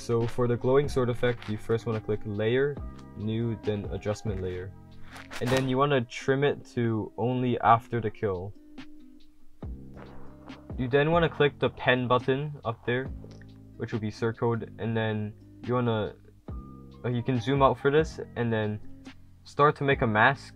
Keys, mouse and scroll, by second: 4.4-5.2 typing, 4.7-6.6 drag, 20.0 w.